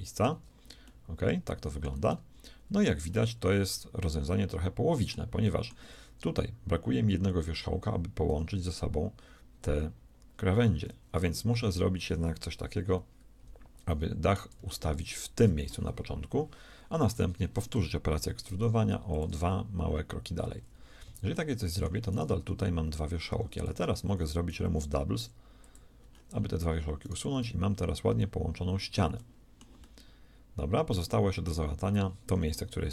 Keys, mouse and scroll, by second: 0.9-5.1 shift+middle drag, 2.8 z, 5.4-7.2 middle drag, 8.3 g, 12.7 KP_1, 14.5-16.3 drag, 17.1 e, 19.9 middle click, 20.1 right click, 21.0 z, 21.3 middle click, 22.1-23.9 right drag, 22.3 g, 23.7 a, 23.9 a, 24.1 w, 24.5 w, 27.0-28.9 right drag, 27.3 g, 29.1-30.9 middle drag, 31.5 middle click.